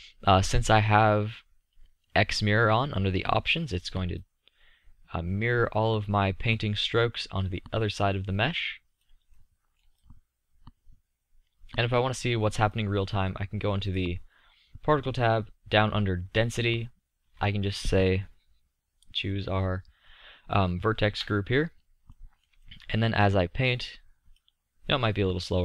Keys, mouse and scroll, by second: 0.1-0.7 scroll up 1, 2.6-3.2 scroll up 1, 4.6-5.1 drag, 5.9 click, 6.1-9.5 middle drag, 10.4-11.9 drag, 11.9-12.4 middle drag, 15.6-17.2 drag, 18.2 click, 18.4-25.5 middle drag.